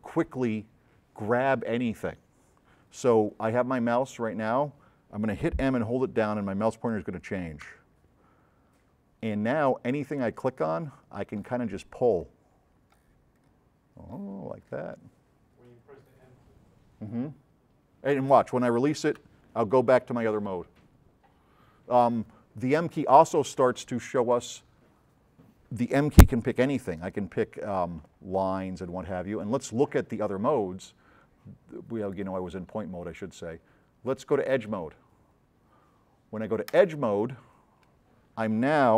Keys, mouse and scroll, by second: 7.8 m, 10.4-11.6 drag, 12.4 click, 13.6 click, 14.7 click, 26.6 m, 28.1-29.5 drag, 32.3 click.